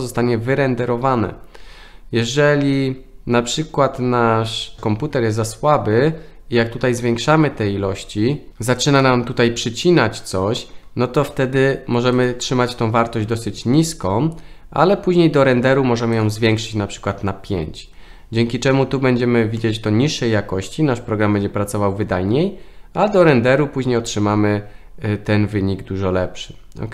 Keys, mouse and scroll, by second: 9.0-10.7 middle drag, 12.1 click, 16.4 click, 16.6 click, 19.6-20.7 middle drag.